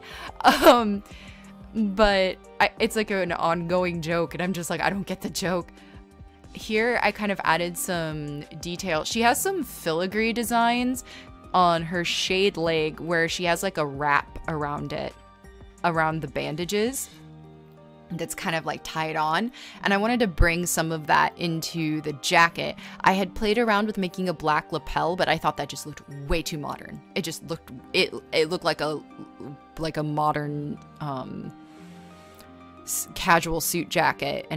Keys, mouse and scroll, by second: 1.8 ctrl+z, 2.4 ctrl+z, 4.7 ctrl+z, 9.4 space, 21.2 space, 23.0 space, 26.1 scroll, 26.8 scroll, 27.5 scroll, 27.8 space, 30.7 z, 32.0 z, 33.1-34.5 typing.